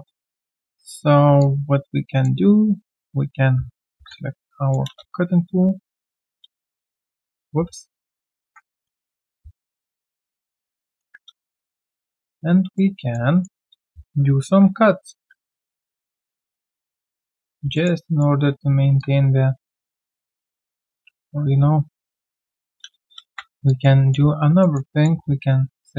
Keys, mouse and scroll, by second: 1.2 right click, 1.4 alt+click, 2.5 click, 2.5-2.8 alt+scroll down 2, 3.9 ctrl+shift+x, 4.3 ctrl+shift+x, 4.3 alt+click, 4.9 space, 5.4 space, 5.9 space, 6.1 ctrl+1, 8.4 ctrl+1, 8.9 right click, 10.3 ctrl+click, 10.8 ctrl+1, 11.6 right click, 13.0 alt+middle click, 13.3 alt+right click, 15.5 shift+click, 16.5 shift+click, 17.7 alt+middle click, 18.0 alt+right click, 21.1 ctrl+z, 23.6 alt+click, 24.0 alt+right click, 24.6 alt+middle click, 24.9 alt+right click, 25.1 q, 25.2 right click.